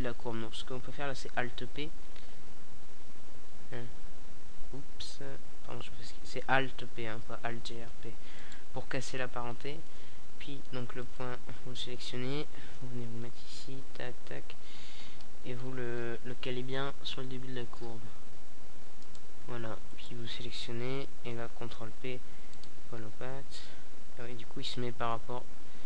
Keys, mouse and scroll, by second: 1.2 alt+p, 3.2-4.5 middle drag, 4.6-6.2 right drag, 6.3 KP_7, 7.1 KP_Decimal, 9.9 g, 12.5 click, 13.3 right click, 15.0 ctrl+p, 16.8-17.9 middle drag, 21.4-22.7 middle drag.